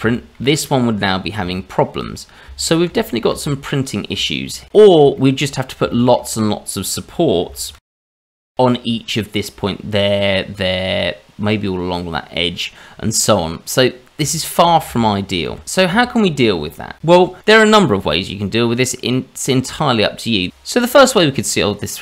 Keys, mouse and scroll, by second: 0.1 shift+middle click, 0.4-0.8 scroll up 3, 1.5 shift+middle click, 2.2 scroll down 2, 2.9 ctrl+z, 3.7 middle click, 4.3 shift+middle click, 4.7 middle click, 5.1 shift+middle click, 5.5 scroll up 2, 5.9 shift+middle click, 7.7 ctrl+shift+z, 8.0 shift+middle click, 8.2-8.8 scroll up 1, 12.7-13.4 scroll down 1, 13.4-14.2 scroll down 2, 13.8 middle click, 14.3 shift+middle click, 15.4 ctrl+z, 15.6 click, 16.0 shift+middle click, 16.6 scroll up 2, 17.9-18.5 scroll up 1, 20.2 middle click, 20.5 middle click.